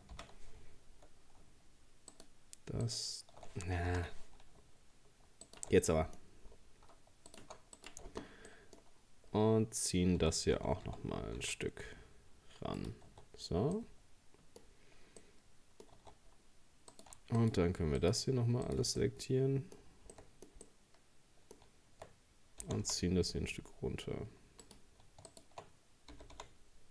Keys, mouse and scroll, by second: 0.2 ctrl+z, 1.0-2.1 shift+scroll up 1, 2.1 alt+shift+right click, 2.9 alt+shift+right click, 3.9 ctrl+z, 5.5 alt+shift+right click, 5.8 middle click, 6.2-7.3 scroll up 4, 7.3 alt+shift+right click, 7.8 shift+right click, 8.1-8.5 scroll down 5, 8.5 middle click, 10.2 g, 13.1 Tab, 13.3-13.8 scroll down 2, 13.8 middle click, 14.7-15.2 scroll up 4, 15.2 middle click, 16.0 Tab, 16.3-16.9 scroll up 2, 16.9 right click, 17.4 shift+right click, 18.0 shift+right click, 18.7 shift+right click, 19.0-22.6 middle drag, 22.6 g, 25.3 shift+right click, 26.1 g.